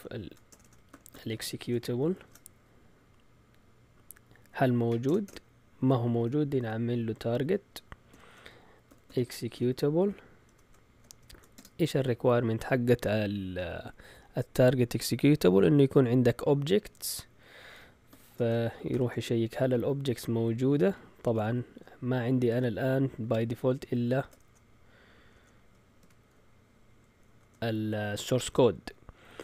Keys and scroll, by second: 0.0-2.6 typing, 5.0 Return, 5.2 Return, 6.6 typing, 8.1-11.5 typing, 18.1-18.9 typing, 20.6-21.8 typing, 23.3 typing, 24.4-26.5 typing, 27.2 shift+Tab.